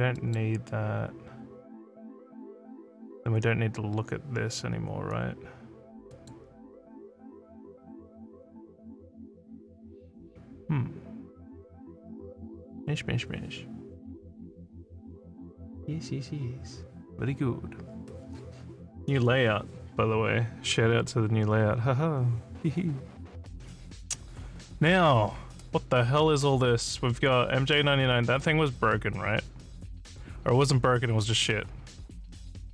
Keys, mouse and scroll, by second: 0.1 middle click, 0.1 scroll down 1, 6.1 click.